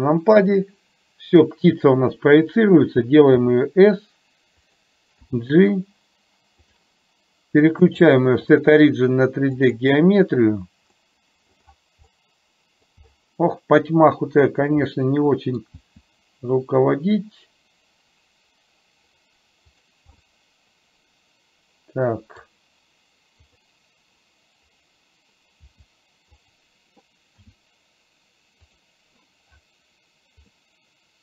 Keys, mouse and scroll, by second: 3.4 s, 5.3 g, 8.0-9.9 drag, 11.2-11.7 middle drag, 12.3-12.9 middle drag, 15.0 middle click, 15.9 g, 20.3-22.7 middle drag, 25.7 g, 27.5 s, 30.7-31.2 middle drag.